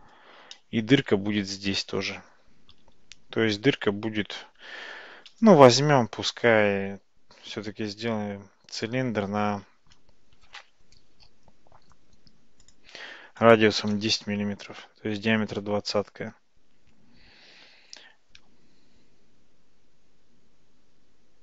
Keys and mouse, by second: 0.6-1.1 middle drag, 5.1 shift+a, 12.7-16.0 drag.